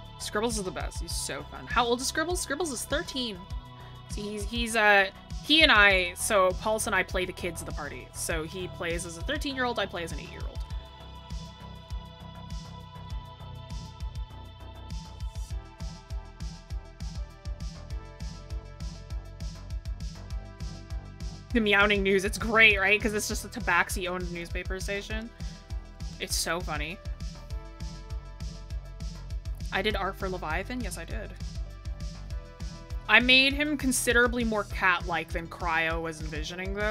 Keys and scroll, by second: 27.2-28.1 scroll down 1, 28.3-29.6 scroll.